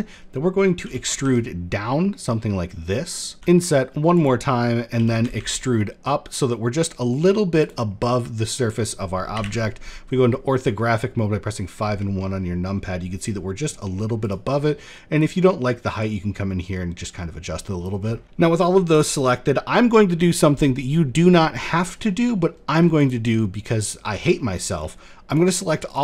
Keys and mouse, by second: 0.4 e, 4.2 click, 4.6 e, 7.5 middle click, 7.5 click, 7.9 middle click, 8.9 KP_5, 9.0 KP_1, 9.9 shift+middle click, 12.0 shift+middle click, 13.8 click, 14.8-17.4 drag, 18.1 middle click, 18.4 alt+click, 21.2 middle click, 22.6 alt+shift+click, 23.8 middle click, 23.9 click, 24.9 alt+shift+click, 25.4 alt+shift+click.